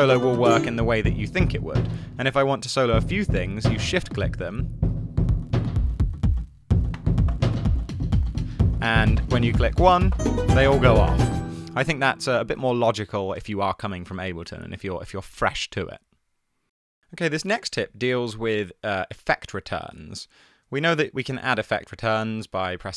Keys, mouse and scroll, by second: 12.4 space, 21.6 alt+super+t.